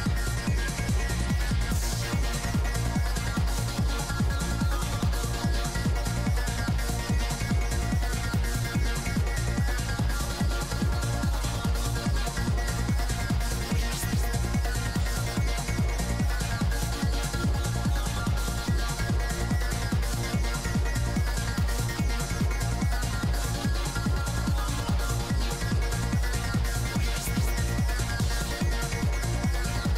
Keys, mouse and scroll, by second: 0.4 i, 0.8 middle click, 1.9 middle click, 3.4 middle click, 4.0-5.0 typing, 4.2-5.3 drag, 5.5-8.7 drag, 8.2-9.6 middle drag, 9.2 g, 9.2 f, 9.6-10.9 drag, 10.7 f, 10.9 f, 11.2 click, 11.7 middle click, 13.7 f, 13.8-15.4 drag, 14.3 f, 14.8 shift+f, 16.0 middle click, 16.0 g, 16.0 f, 17.5-18.7 drag, 17.5-18.7 right drag, 18.7-19.8 typing, 19.1-22.3 drag, 20.8 middle click, 21.6 middle click, 22.1-23.5 middle drag, 23.7 g, 23.7 f, 24.7 click, 24.9 f, 26.3-28.4 drag, 26.3 f, 27.4 f, 29.4 i, 29.4 f, 29.8-29.9 drag.